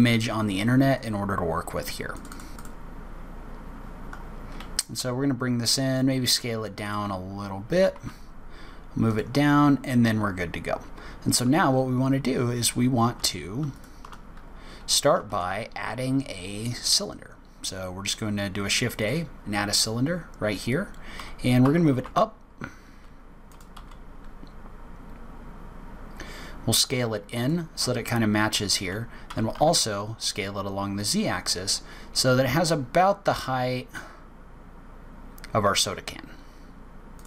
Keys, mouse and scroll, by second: 3.9-4.4 scroll down 10, 5.0 s, 7.3 s, 7.7 g, 9.4-10.5 scroll up 9, 13.7 shift+right click, 15.3 shift+a, 19.9-21.2 scroll down 3, 21.2 g, 23.8 s, 29.3 s.